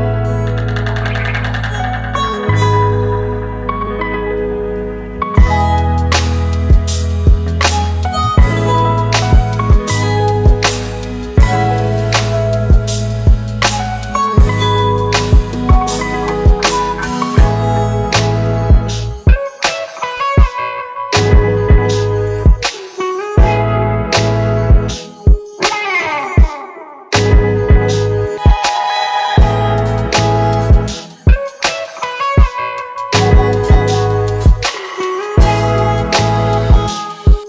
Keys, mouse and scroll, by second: 3.0 right click, 5.6-7.9 typing, 14.9 right click, 15.9-16.9 typing, 28.8 right click, 32.2 space, 35.5 ctrl+click, 36.4 ctrl+click, 37.2 ctrl+click.